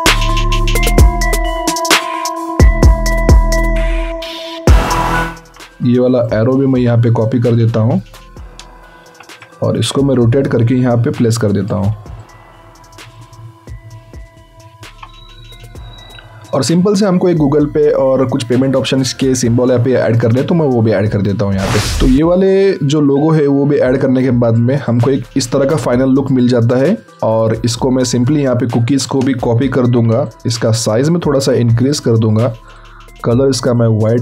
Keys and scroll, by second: 0.3 ctrl+a, 3.1 ctrl+v, 3.2 ctrl+a, 9.0 ctrl+t, 29.5 ctrl+alt+t.